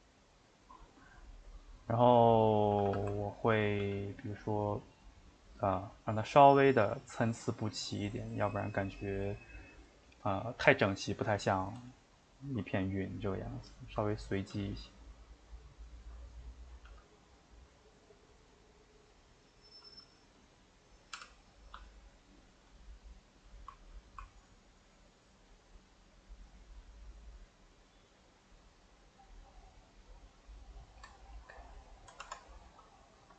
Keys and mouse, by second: 1.3-2.7 middle drag, 2.7 a, 2.8 a, 3.4 ctrl+Right, 3.8 g, 5.6 middle click, 6.2 click, 6.7 g, 8.1 click, 8.5 g, 12.4 middle click, 13.0 click, 13.7 shift+click, 14.0 middle click, 14.5 g, 16.3 click, 16.9 g, 20.1 click, 21.2 g, 30.8-32.3 shift+middle drag, 32.3 Tab, 32.7-33.3 middle drag.